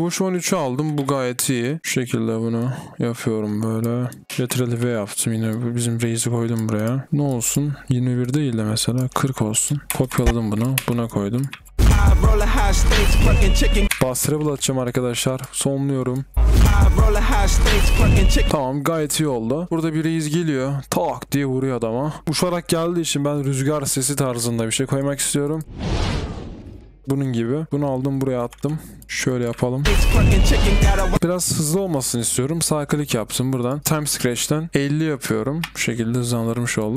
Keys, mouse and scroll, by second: 4.3-4.8 typing, 9.8-11.3 typing, 14.0 b, 16.1-17.2 typing, 18.5-19.3 typing, 22.3-23.2 typing, 23.7 double click, 25.6 space, 26.7 space, 28.4-30.0 typing, 31.1 right click, 31.4 double click, 31.7 right click, 33.8-34.7 typing, 36.9 Return, 36.9 click.